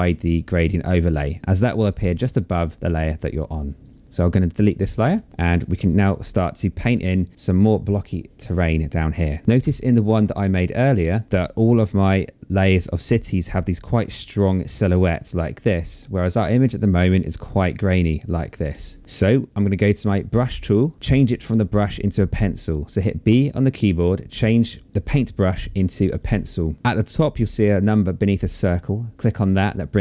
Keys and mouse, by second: 3.4 click, 4.6 Delete, 9.4 click, 15.9 click, 20.3 click, 24.7 click, 26.0 click, 28.8 click.